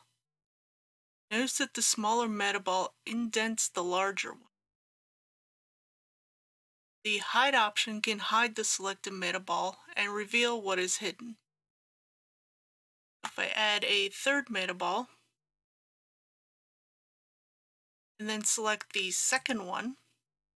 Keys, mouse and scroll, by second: 6.4 click, 13.1 shift+d, 16.3 click.